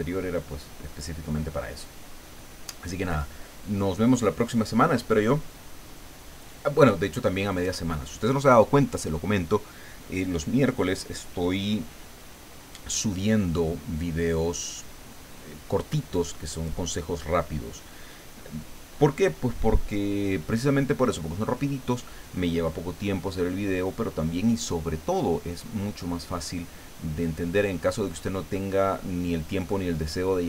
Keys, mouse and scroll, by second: 13.8-14.2 scroll down 2.